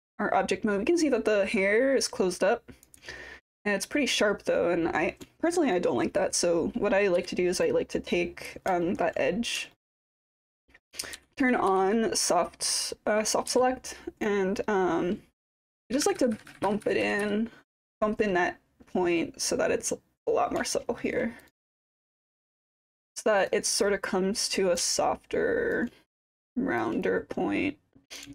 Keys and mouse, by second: 5.3 alt+middle drag, 5.6 alt+click, 7.2 1, 7.6 click, 8.8 alt+click, 8.9 alt+middle click, 9.2 middle click, 9.7 alt+click, 9.9 alt+middle click, 11.2 b, 11.7 b, 13.5 w, 14.2-20.3 drag, 20.8 alt+middle click, 21.8 click, 23.8 click, 24.9 alt+click, 26.3 click, 26.5 alt+click, 27.2 click.